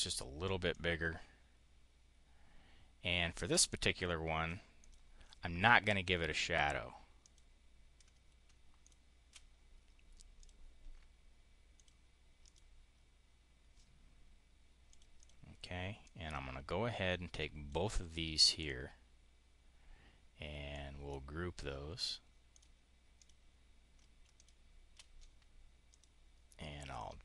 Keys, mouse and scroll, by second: 0.6-4.4 drag, 4.6 click, 7.1 click, 8.7 shift+click, 10.2 click, 11.6 click, 12.3 click, 14.8 click, 15.1 click, 15.8-17.7 drag, 20.6 click, 22.4 click, 23.0 click, 24.2 shift+click, 25.8 click, 26.8 click.